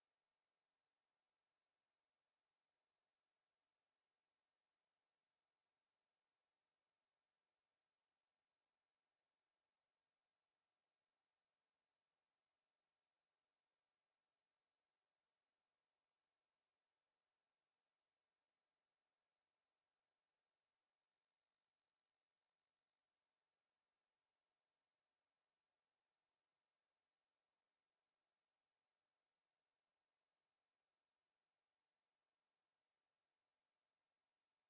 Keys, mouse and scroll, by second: 2.9 ctrl+d, 11.4 ctrl+d, 16.6 ctrl+d, 20.2 ctrl+d.